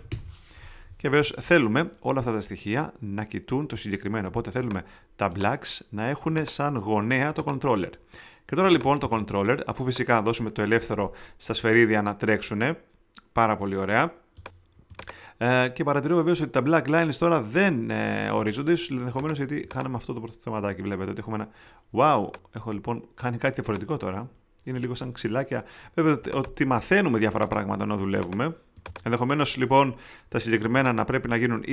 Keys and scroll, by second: 0.0-0.4 typing.